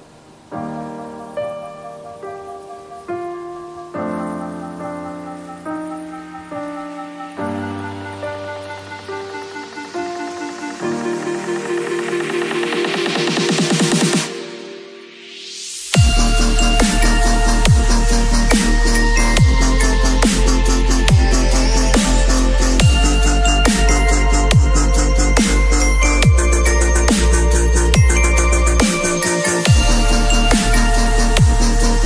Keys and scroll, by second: 2.0 v, 2.7 space, 6.8 b, 8.3 [, 10.2 0, 17.6 v, 26.6 b, 29.4 x, 30.8 v.